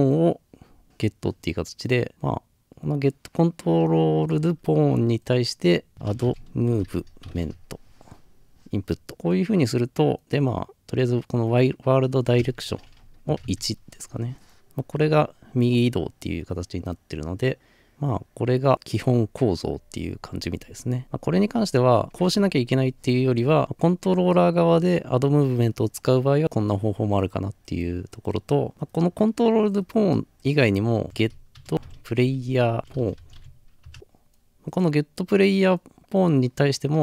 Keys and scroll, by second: 5.9-7.3 typing, 9.1 typing, 13.5 Return, 13.5 1, 31.7-33.4 typing, 33.9 Return.